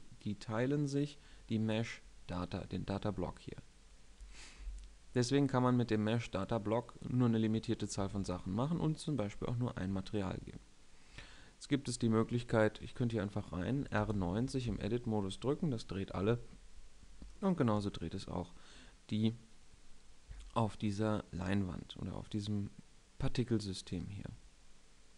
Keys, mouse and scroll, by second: 11.1 Tab, 12.6 KP_3, 13.9 r, 14.6 Tab, 16.0 KP_7, 21.8 middle click, 22.9-25.1 middle drag.